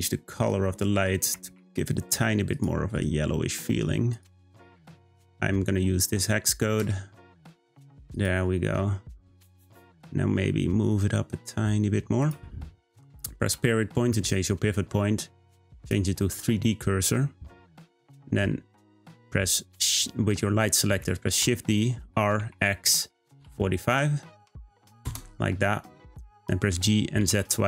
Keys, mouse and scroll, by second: 2.5 click, 8.6-10.2 scroll down 1, 10.2 g, 13.5 ., 21.4 shift+d, 26.7 g.